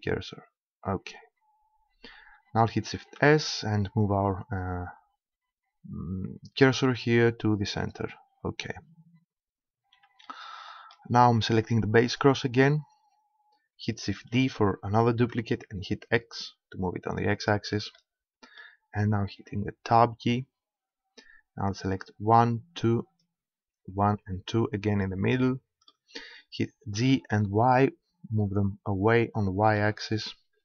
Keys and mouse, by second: 3.2 shift+s, 12.1-13.9 drag, 14.2 shift+d, 17.5 click, 18.0-19.3 middle drag, 19.3 Tab, 24.9-25.9 middle drag, 26.9 g, 29.7-30.6 drag.